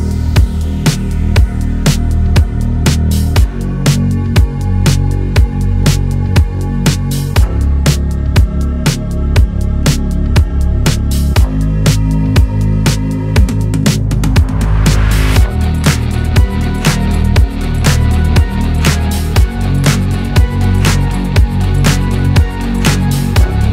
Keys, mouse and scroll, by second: 0.1-1.1 middle drag, 1.1-2.3 drag, 2.3 scroll up 2, 3.1-4.3 middle drag, 7.1 scroll up 1, 7.5-11.3 drag, 12.4-13.4 middle drag, 13.8 click, 14.4 ctrl+z, 14.6 middle click, 14.8 scroll up 1, 17.1-18.7 drag, 19.9-22.6 drag, 22.6 scroll down 3, 22.8-23.7 drag.